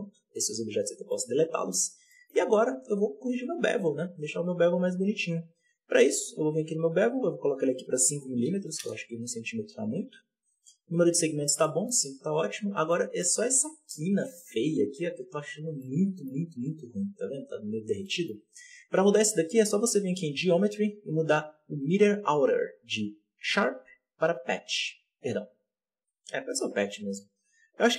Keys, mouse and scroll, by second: 0.3 right click, 0.7 x, 1.0-1.7 middle drag, 1.7-2.0 scroll up 1, 2.0 shift+middle drag, 2.3-2.7 scroll up 1, 2.7 right click, 3.3-3.9 scroll down 2, 3.9-7.0 scroll down 1, 7.0-8.7 drag, 8.7 m, 11.1-11.6 scroll up 3, 11.6-14.5 shift+middle drag, 14.5 z, 15.7-17.8 middle drag, 17.8 z, 17.9-20.1 middle drag, 20.1-27.9 drag.